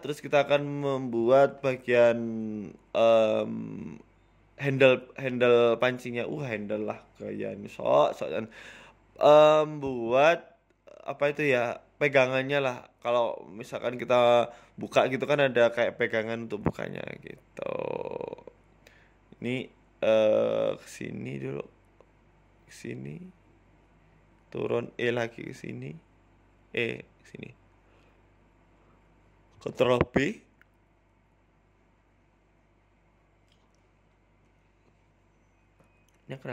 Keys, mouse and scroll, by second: 0.3 Tab, 0.6 shift+a, 2.2-2.6 scroll down 5, 2.8 g, 3.7 shift+middle click, 4.0 s, 7.5 Delete, 8.0 shift+a, 9.9 g, 10.7 middle click, 11.1 s, 12.8 KP_1, 13.1 Tab, 13.3-14.4 scroll up 3, 13.7 ctrl+r, 14.4 click, 14.9 Delete, 15.9 shift+middle click, 16.4 click, 18.3 middle click, 19.0 KP_1, 19.3-19.6 scroll up 3, 19.5 shift+middle click, 19.9 click, 21.1 e, 23.9 e, 25.6 e, 28.0 e, 29.8 click, 30.6 ctrl+b, 32.9 click, 33.3 ctrl+b, 34.6 scroll up 4, 34.9 shift+middle click, 35.2 middle click, 36.1 ctrl+b.